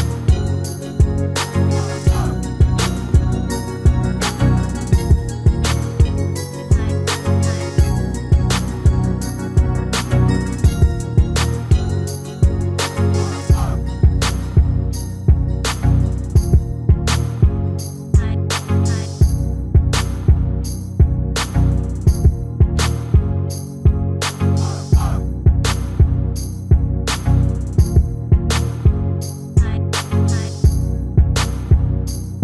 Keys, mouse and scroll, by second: 0.4-2.1 drag, 1.6 s, 2.3 click, 3.7-5.5 middle drag, 6.6-8.4 middle drag, 7.6-9.4 drag, 9.0-10.8 middle drag, 11.5-13.2 drag, 13.2-15.0 middle drag, 14.6 shift+d, 18.2 KP_7, 19.9-21.7 drag, 22.5-29.7 middle drag, 30.4-32.1 drag, 31.6 shift+a.